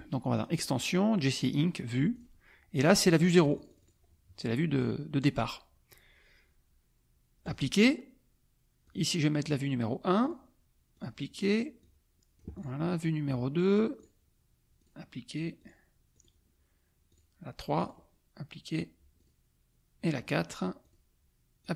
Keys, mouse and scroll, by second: 0.3 click, 2.1 click, 3.2 click, 4.8 click, 7.4 click, 9.0 click, 10.3 click, 10.9 click, 11.8 click, 14.0 click, 14.8 click, 15.6 click, 16.1 click, 17.1 click, 17.8 click, 19.4 click, 20.8 click, 21.6 click.